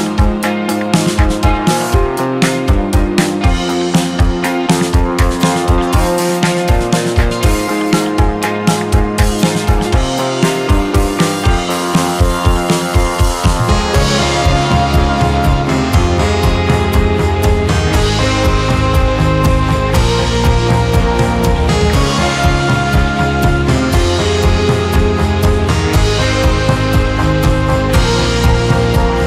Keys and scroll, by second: 0.9 ctrl+KP_0.